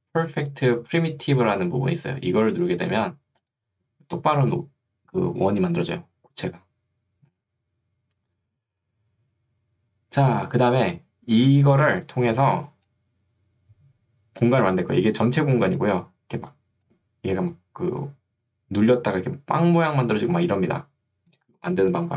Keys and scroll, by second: 2.9 Escape, 11.9 ctrl+2, 21.9 Escape.